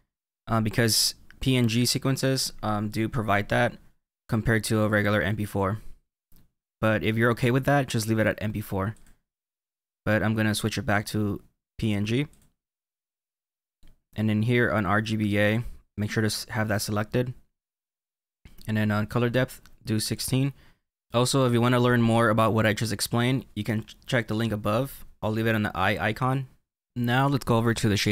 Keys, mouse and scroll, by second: 8.9 click, 13.3-15.3 scroll down 3, 15.3 click, 20.0 click, 26.9-27.4 scroll up 4.